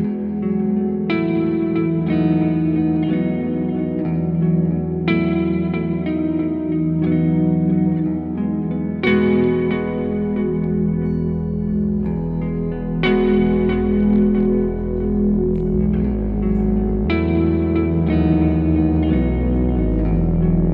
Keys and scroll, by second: 5.5 m, 7.1 space.